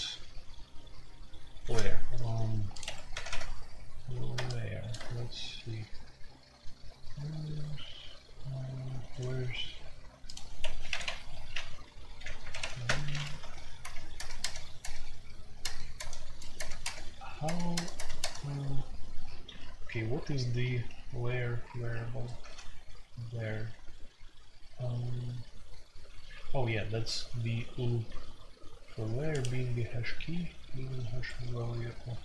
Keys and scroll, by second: 2.8 Escape, 3.1 typing, 10.6 Escape, 11.3-17.7 typing, 12.8 Return, 20.6 n, 22.4 g, 31.0 Escape.